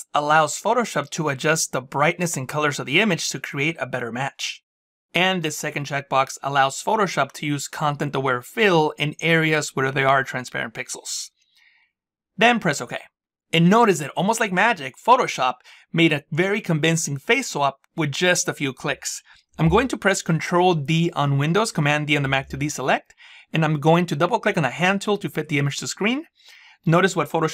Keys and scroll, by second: 20.4 ctrl+d.